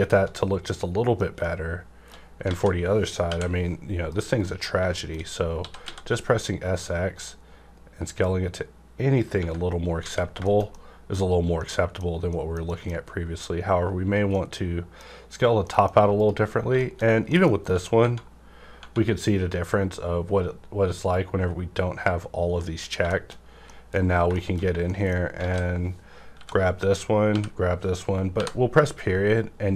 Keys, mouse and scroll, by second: 0.6 middle click, 0.6 scroll down 1, 1.4-2.5 shift+middle drag, 2.5 alt+a, 3.2 l, 4.1 KP_Decimal, 4.4 middle click, 4.7-5.8 scroll up 3, 4.9 shift+middle click, 5.6 typing, 9.2 click, 9.2 typing, 9.3 Tab, 9.7 scroll down 1, 10.0 alt+a, 10.5 shift+middle click, 10.9 shift+middle click, 11.6 middle click, 12.1 scroll up 1, 12.2 middle click, 12.3 middle click, 12.7 middle click, 12.9 scroll up 1, 14.3-16.1 middle drag, 16.1 click, 16.5-17.1 scroll down 3, 16.8 middle click, 16.8 shift+middle click, 17.3 middle click, 17.6 Tab, 17.6 Right, 21.1 click, 21.1-23.1 drag, 23.1 shift+middle click, 23.1 click, 23.5 scroll up 1, 23.7 middle click, 23.9-24.4 scroll down 3, 24.3 shift+middle click, 24.3 shift+middle click, 24.8 shift+middle click, 25.4 alt+a, 26.3-27.3 typing.